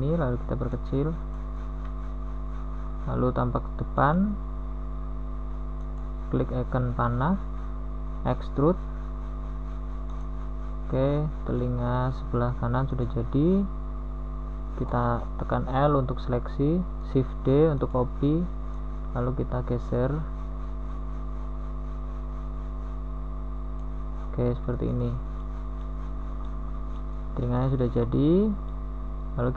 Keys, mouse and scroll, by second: 2.2 KP_1, 7.6 z, 8.5 e, 10.7 a, 11.1 z, 15.2 l, 17.6 shift+d, 18.6 z, 24.2 z, 24.6 a, 25.0 Tab, 25.2 z, 26.0 z, 27.2 KP_1.